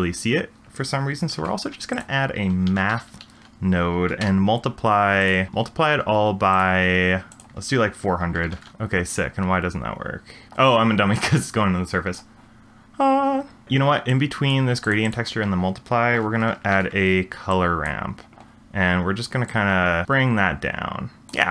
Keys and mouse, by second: 1.3 shift+a, 5.5-6.6 drag, 7.3-8.7 drag, 8.5 0, 11.4 click, 13.6 g, 14.1-14.6 drag, 14.8 g, 15.0 click, 16.4 ctrl+r, 19.5-21.3 drag.